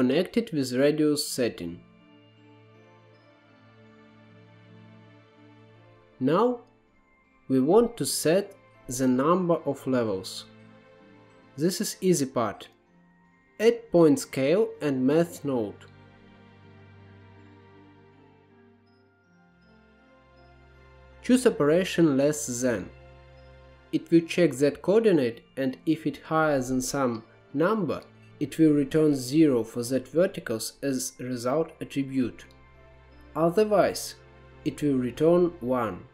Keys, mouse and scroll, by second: 1.3-1.7 drag, 1.7-2.4 right drag, 2.5-3.0 drag, 3.0 g, 3.5 click, 4.4 scroll up 4, 4.5 middle click, 4.8 click, 5.4 ctrl+z, 5.5-7.0 middle drag, 7.0 click, 8.8 click, 9.0 shift+a, 14.6-15.1 scroll up 3, 14.7 middle click, 15.1 click, 16.1 ctrl+z, 16.2 ctrl+z, 17.0-17.8 drag, 17.9 scroll down 1, 18.1-18.4 middle drag, 18.4-19.4 drag, 19.4 shift+a, 21.7-25.3 drag, 26.4-31.9 drag, 33.3-36.1 drag.